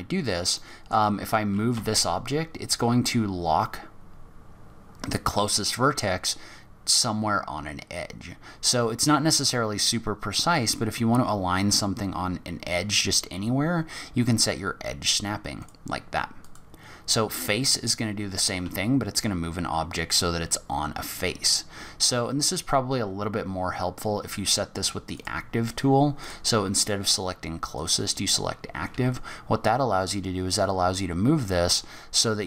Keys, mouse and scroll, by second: 0.5 middle click, 1.7 g, 16.4 click, 18.6 g, 26.2 click, 28.9 g.